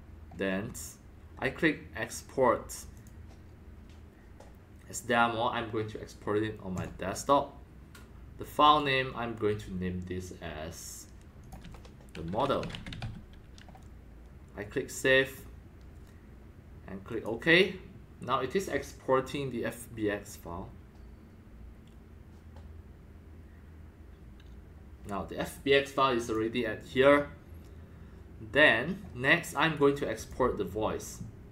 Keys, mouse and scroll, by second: 2.9 click, 6.7 click, 8.6 click, 11.4 click, 12.3-13.5 typing, 15.3 click, 17.1 click, 19.7-22.3 drag, 26.2 click, 26.3 click, 29.8-30.4 drag, 30.4-31.5 drag.